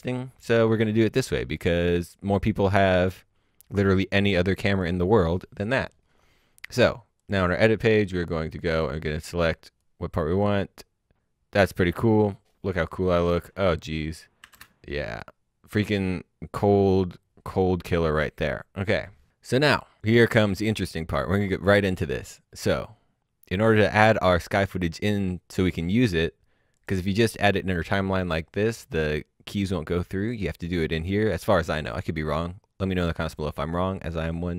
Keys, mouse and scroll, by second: 3.0 click, 7.2 click, 13.1 space, 14.4 space, 14.8 click, 19.8 click, 26.7 click, 30.2 click.